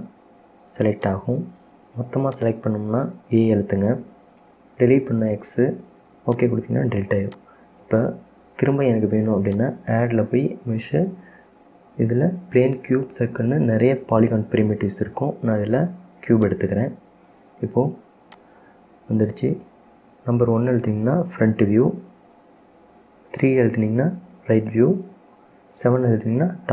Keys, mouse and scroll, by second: 1.1 click, 2.4 click, 3.6 a, 5.5 x, 7.5 click, 9.6-12.8 drag, 18.5 click, 21.3 KP_1, 23.8 KP_3, 25.6 KP_7.